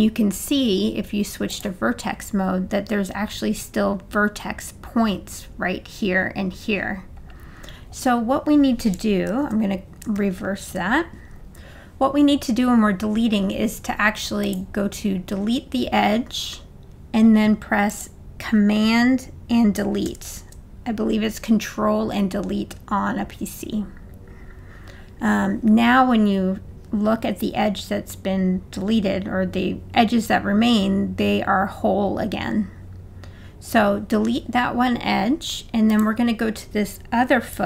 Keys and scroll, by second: 9.3 super+z, 10.2 super+z, 20.1 super+BackSpace.